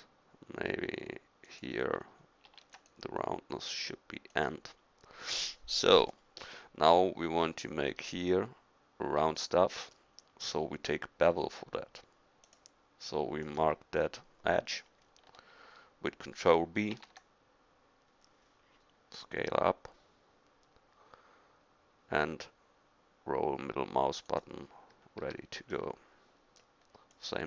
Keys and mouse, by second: 2.5 ctrl+r, 16.9 ctrl+b, 25.2 a.